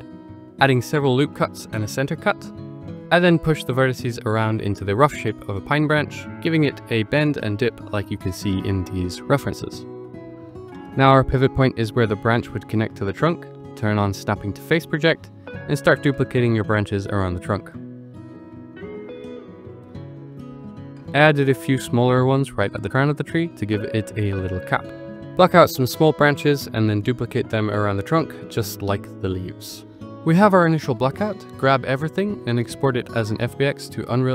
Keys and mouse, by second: 0.5 ctrl+r, 1.6 ctrl+r, 1.8 Tab, 2.1 click, 2.4 shift+click, 2.9 click, 3.3 g, 4.1 click, 4.5 g, 5.2 click, 5.4 Tab, 5.4 g, 6.4 z, 6.9 click, 7.8 g, 8.0 z, 8.9 click, 9.2 click, 11.2 click, 12.0 shift+click, 12.3 click, 12.9 middle drag, 13.5 middle click, 15.0 click, 15.6-17.0 drag, 17.3 drag, 17.7-29.3 typing, 18.2 click, 18.6 click, 19.1 click, 19.4 click, 19.6 click, 19.9 drag, 20.4 click, 21.0 click, 21.7 click, 21.9 click, 22.4 click, 22.8 click, 23.2 drag, 23.6 click, 24.3 click, 24.8 shift+click, 25.8 Tab, 25.9 ctrl+r, 26.4 click, 26.8 Tab, 26.9 click, 27.1 Tab, 27.3 shift+click, 27.8 click, 28.0 click, 28.4 click, 28.7 shift+click, 29.1 click, 29.5 click, 30.4-30.9 drag, 32.0-34.2 drag.